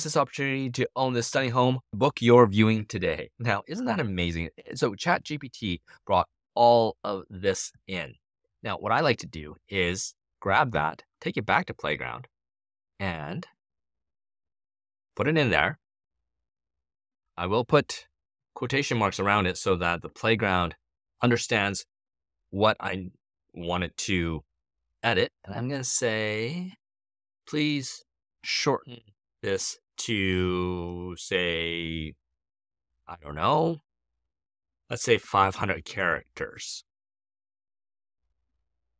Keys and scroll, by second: 10.3 super+c, 14.0 BackSpace, 14.4 super+v, 18.0 shift+', 20.9 shift+', 25.7 Left, 26.4-30.1 typing, 34.6-37.6 typing.